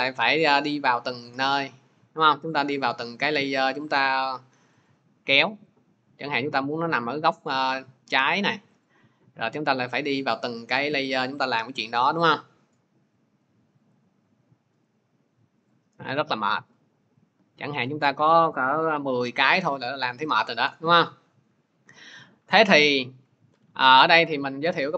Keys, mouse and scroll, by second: 0.7 click, 4.7 click, 6.6 click, 8.7 click, 11.0 click, 13.2 click, 13.9 click, 15.5 click, 17.7 click, 21.3 ctrl+z, 21.6 ctrl+z, 22.7 ctrl+z.